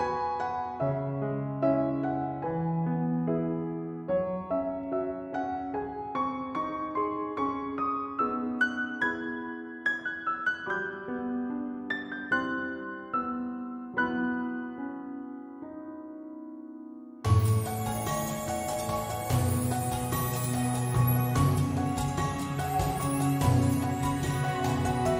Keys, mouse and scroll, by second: 0.4 click, 2.2 n, 5.1 i, 8.7-11.3 right drag, 14.7 shift+F6, 17.1-22.1 drag, 21.2 right click.